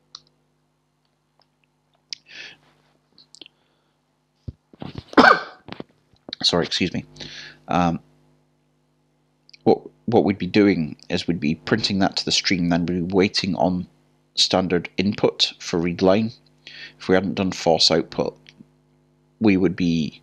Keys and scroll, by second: 0.8-2.5 typing.